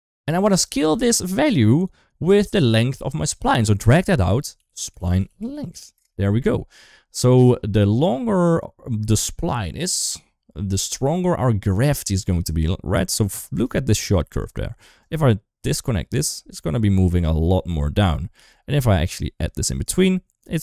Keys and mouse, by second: 3.1-7.3 drag, 7.8 shift+middle click, 9.0-9.4 drag, 13.5 shift+middle click, 14.9-16.2 ctrl+right drag, 18.2 ctrl+z, 19.6 ctrl+right click, 20.4 ctrl+z.